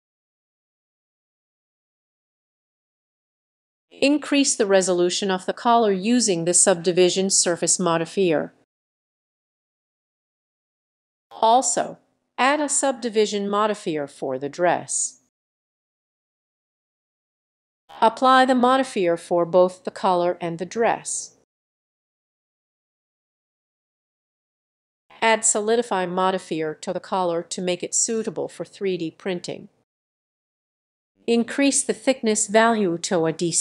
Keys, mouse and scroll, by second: 0.2 click, 2.3 click, 2.6 click, 2.9 click, 6.9 click, 9.4 click, 14.0 click, 14.4-15.4 scroll down 2, 15.7-16.1 scroll down 1, 16.1-18.3 middle drag, 18.3-26.0 drag, 28.2 scroll up 4, 28.3 middle click, 31.5 click, 31.7 click, 32.1 click, 32.5 click, 32.7 click, 32.9 click, 33.4 click.